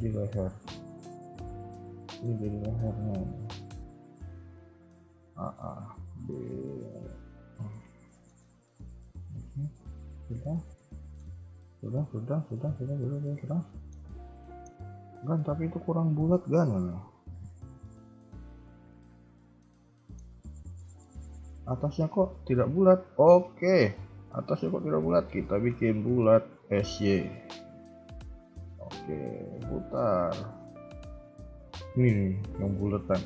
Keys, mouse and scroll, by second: 0.2 g, 2.0 shift+middle click, 2.5 b, 3.3 g, 4.8 a, 4.9 a, 5.4 b, 6.3 g, 7.6-7.9 scroll down 5, 8.1 shift+middle click, 8.3-9.0 scroll up 2, 9.0 KP_3, 9.7 middle click, 11.3-13.9 typing, 13.6 middle click, 14.4 shift+middle click, 14.7-15.0 scroll up 1, 15.1 a, 16.1 a, 18.0 scroll up 1, 18.0 middle click, 22.6 KP_1, 22.9-23.7 scroll up 1, 23.7 b, 24.5 KP_3, 25.0 shift+middle click, 26.6 s.